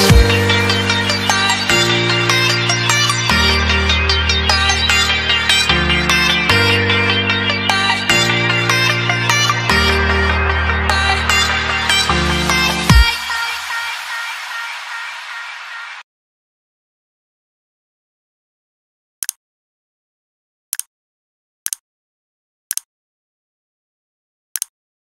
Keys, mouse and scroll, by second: 2.5 ctrl+z, 3.5 ctrl+s, 4.7 click, 5.2 ctrl+s, 6.5 click.